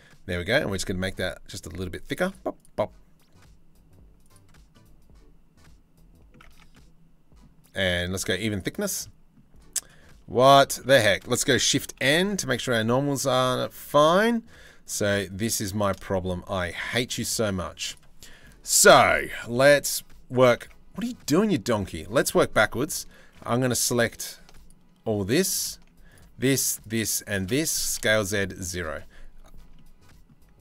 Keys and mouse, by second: 4.3-5.9 middle drag, 6.0 Tab, 6.3 click, 8.1 click, 9.3 click, 9.9 Tab, 10.3 Tab, 10.5 a, 11.7 shift+n, 12.2 Tab, 12.5 z, 16.4 z, 17.2 z, 19.3 Tab, 20.5 Tab, 21.3 Tab, 21.7 2, 26.3 shift+click, 27.3 s.